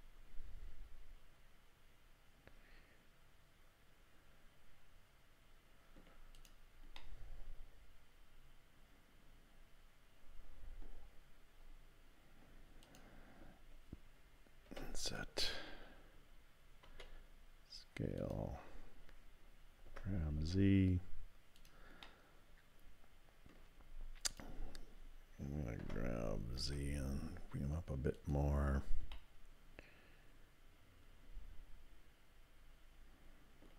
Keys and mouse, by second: 3.0 click, 3.5-6.0 middle drag, 7.0-8.8 drag, 8.8-10.9 middle drag, 12.8 click, 16.9 s, 19.9 g, 22.0-23.5 drag, 24.3 click, 25.8 g, 29.2-33.7 drag.